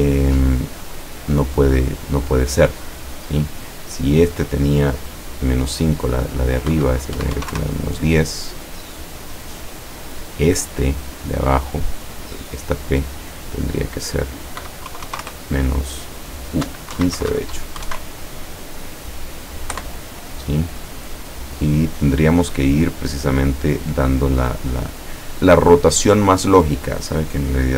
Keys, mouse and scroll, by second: 0.8 click, 6.8 KP_Subtract, 7.2 KP_1, 7.4 KP_0, 7.5 KP_Enter, 9.4 click, 12.0 click, 12.8 click, 14.6 KP_Subtract, 14.9 KP_2, 15.1 KP_0, 15.2 KP_Enter, 17.0 Right, 17.2 Delete, 17.8 KP_1, 19.7 KP_Enter, 21.9 click.